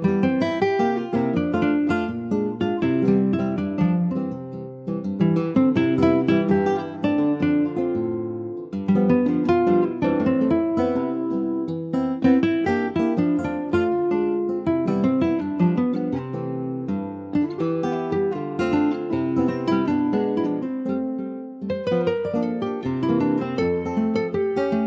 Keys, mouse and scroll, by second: 0.7 shift+a, 2.0 click, 2.4 alt+middle click, 2.9 s, 4.2-5.3 alt+scroll up 1, 5.3 ctrl+s, 5.5 alt+middle click, 6.2 shift+middle click, 6.5 s, 7.7 click, 9.4 click, 10.5-10.8 scroll up 4, 10.8 shift+middle click, 11.2 shift+scroll up 2, 11.5 s, 12.9 click, 13.8-15.2 drag, 15.2 scroll up 2, 15.4 shift+middle click, 16.2 s, 18.2 alt+middle click, 18.9 shift+middle click, 19.4 click, 20.9-22.3 middle drag, 22.3 ctrl+s, 22.4 click, 22.7 shift+middle click, 23.1 click, 23.3 scroll down 2, 23.6 middle click, 24.0-24.4 scroll down 1, 24.4 alt+middle click.